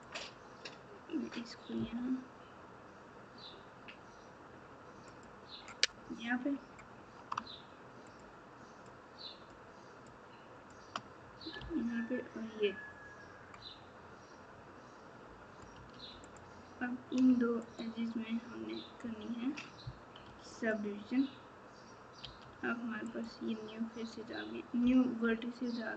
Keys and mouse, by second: 22.2 1.